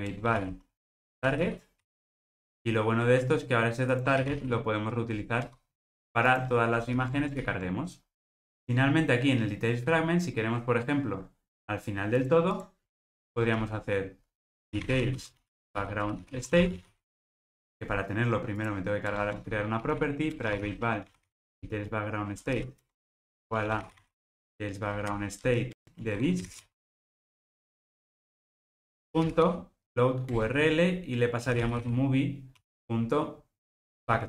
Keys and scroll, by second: 5.5 Return, 6.9 alt+super+l, 20.4 Return, 30.4 Return.